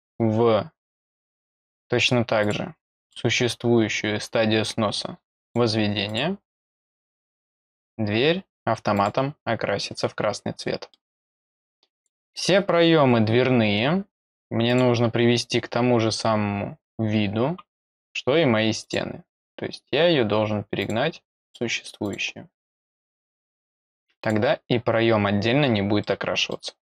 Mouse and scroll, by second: 2.4 click, 3.0 click, 5.4 click, 6.0 click, 7.2 click, 7.8 middle click, 8.1 middle click, 8.1 scroll down 2, 8.9 click, 10.2 scroll down 2, 10.6 middle click, 11.9 click, 14.6 click, 17.7 scroll down 2, 18.8 click, 19.3 click, 20.8 click, 21.4 click, 22.0 click, 23.4 click, 24.1 click, 26.0 middle click, 26.6 scroll down 2.